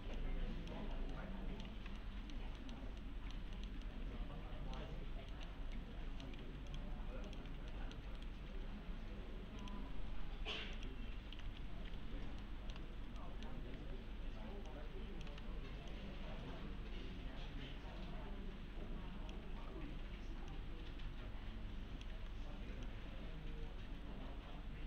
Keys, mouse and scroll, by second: 0.5-0.8 click, 0.9 scroll down 1, 1.1-1.8 alt+middle click, 1.7 1, 2.0-2.9 alt+middle click, 3.0-4.8 alt+middle click, 3.9 alt+middle click, 5.0-5.3 scroll up 1, 5.3 middle click, 5.8-6.4 alt+middle click, 6.4 4, 6.7 click, 7.3 ctrl+click, 7.7 middle click, 8.2 right click, 9.6 click, 11.1-12.0 typing, 12.1-12.4 scroll down 1, 12.4-13.0 middle click, 12.9 scroll up 1, 13.2 middle click, 13.5 scroll down 1, 13.7 e, 14.7-15.3 click, 15.3 w, 15.9-19.4 click, 19.4 e, 20.5-22.1 click, 22.1 w, 22.9-24.8 click.